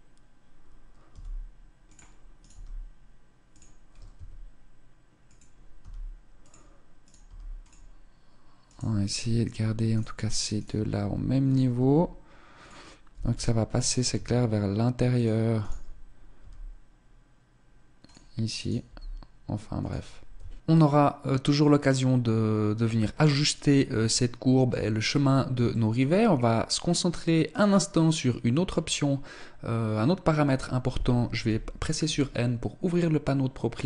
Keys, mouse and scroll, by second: 0.7 g, 2.0 right click, 2.1 g, 3.6 s, 5.4 g, 6.6 right click, 6.8 g, 7.2 click, 8.2 right click, 9.5 right click, 9.7 right click, 10.6 g, 11.4 s, 12.2 click, 12.7 g, 13.7 s, 15.2 right click, 15.8 g, 18.2 right click, 18.5 g, 20.0 Tab, 23.7 shift+middle click, 24.8 shift+middle click, 24.8-25.2 scroll up 1, 27.1 right click, 31.0 n.